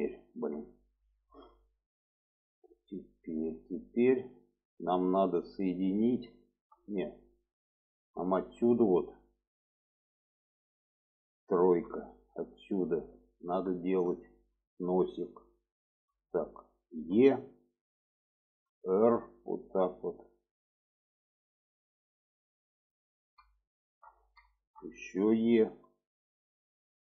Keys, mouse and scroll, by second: 0.3 shift+middle click, 1.3-1.6 shift+middle drag, 1.8-2.5 middle drag, 3.0 middle click, 3.6-3.9 shift+middle drag, 4.4-6.8 middle drag, 7.1 shift+middle drag, 8.3 shift+middle click, 8.8-9.4 middle drag, 10.3 middle click, 11.8 3, 12.4 click, 12.9 middle click, 13.9 shift+middle click, 14.8 shift+middle click, 15.7 shift+middle click, 17.1 e, 18.6 r, 20.3-22.6 drag, 23.5 shift+middle click, 24.5 shift+middle click, 25.8 e.